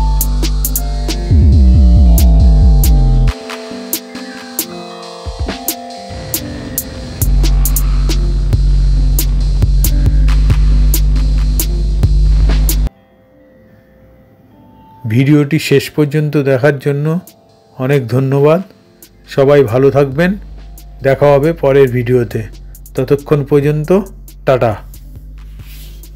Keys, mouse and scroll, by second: 2.3 space, 9.9 ctrl+0.